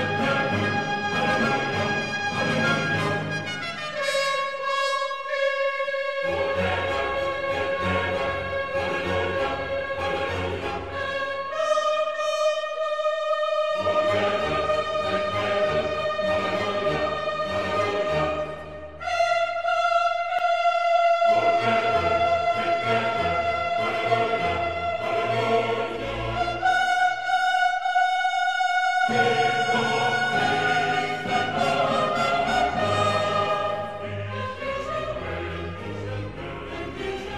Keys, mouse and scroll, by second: 3.6-4.2 typing, 7.8 click, 8.5-16.9 middle drag, 19.9-20.5 typing, 23.0 click, 24.2-28.1 middle drag, 28.2 scroll up 1, 29.7 s, 31.5 x, 37.2 click.